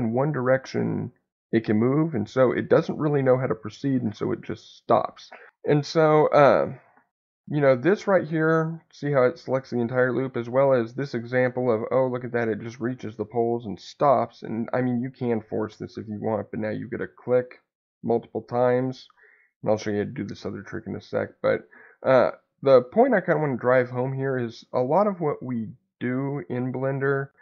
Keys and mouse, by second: 6.3 middle click, 7.9 alt+click, 8.9 middle click, 10.9 alt+click, 12.2-14.7 middle drag, 16.0 alt+click, 18.3 middle click, 25.2 middle click.